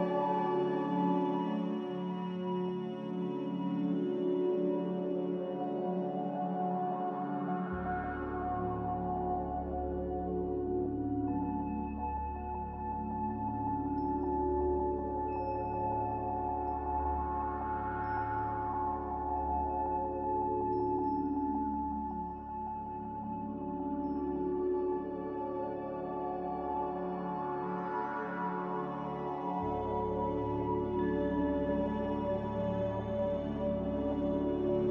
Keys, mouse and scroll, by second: 6.7 click.